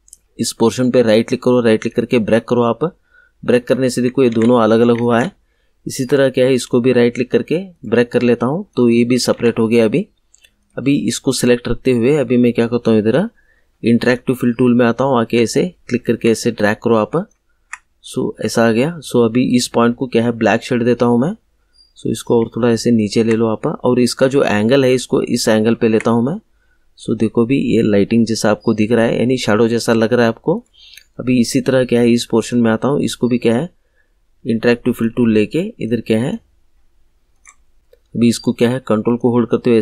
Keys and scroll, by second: 4.2 ctrl+z, 9.3 ctrl+z.